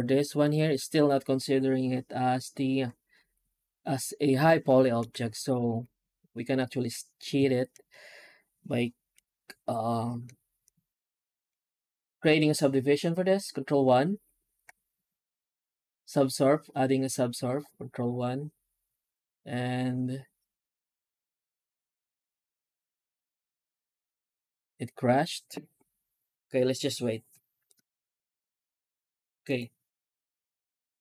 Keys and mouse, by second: 4.4 shift+middle click, 5.3 ctrl+s, 5.6 Tab, 29.3 click.